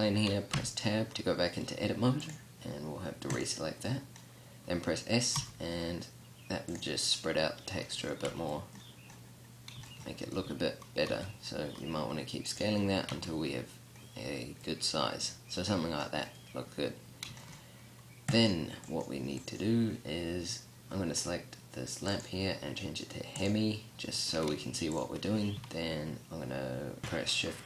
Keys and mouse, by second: 0.8 Tab, 5.6 s, 8.5 Tab, 10.5 Tab, 11.3 s, 12.8 click, 13.3 Tab, 18.5 right click, 18.9-23.5 drag, 24.2-24.5 middle drag, 24.5 g.